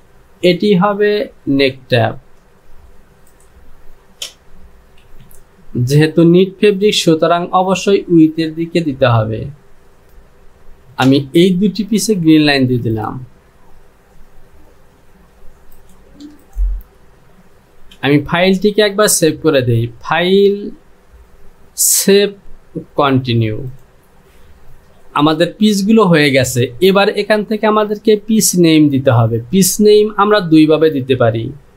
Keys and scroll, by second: 5.1 j, 18.0 j.